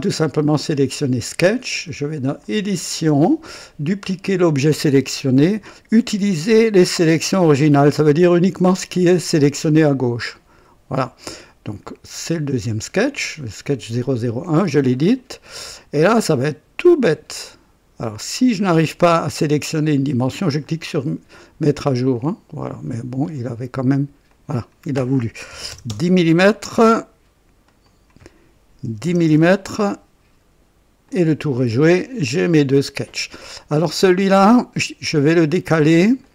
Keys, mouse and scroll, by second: 2.3 click, 4.0 click, 10.3 click, 13.9 click, 14.9-15.2 scroll up 1, 15.4 right click, 20.6 click, 22.1 click, 24.2 click, 25.5 KP_1, 25.6 KP_0, 25.7 KP_0, 25.8 KP_Enter, 27.6 click, 28.8 KP_1, 29.0 KP_0, 29.2 KP_Enter, 31.0 click, 32.2 click, 33.4-35.3 drag, 36.0 click, 36.2 click.